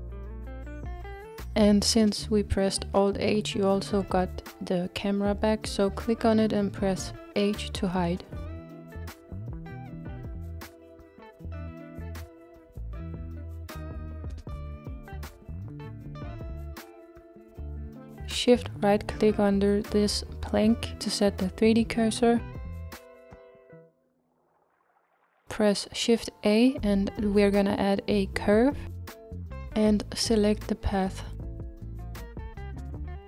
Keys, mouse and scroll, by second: 0.0 click, 0.9-2.0 scroll down 2, 2.0-3.2 scroll down 1, 3.2-4.9 scroll down 1, 4.9 click, 7.3 h, 8.9-9.3 scroll up 2, 10.2 shift+middle click, 10.7 scroll up 2, 11.7-13.5 middle drag, 13.5-14.7 scroll up 1, 14.7-17.2 middle drag, 17.2-17.8 scroll up 1, 17.8-18.4 scroll up 1, 20.2-20.6 shift+right drag, 20.6-25.2 middle drag, 26.2 shift+a.